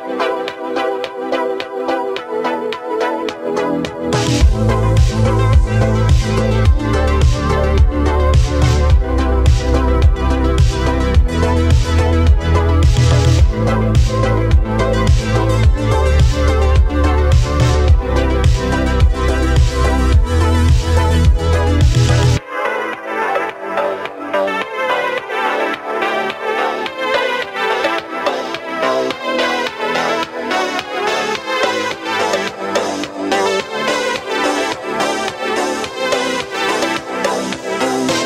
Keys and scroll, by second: 1.4 x, 22.1 ctrl+z, 25.7 ctrl+z, 30.2 ctrl+z.